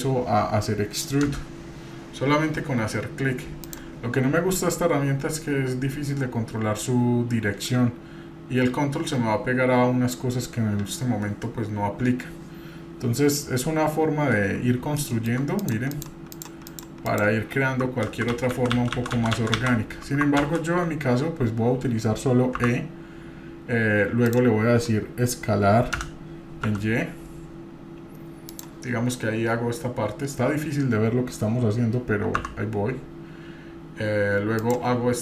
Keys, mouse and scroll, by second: 1.2 s, 14.8 scroll down 2, 15.0-15.4 shift+middle drag, 15.6 click, 15.9 click, 16.3 click, 16.7 click, 17.1 click, 18.1-20.0 ctrl+z, 22.6 e.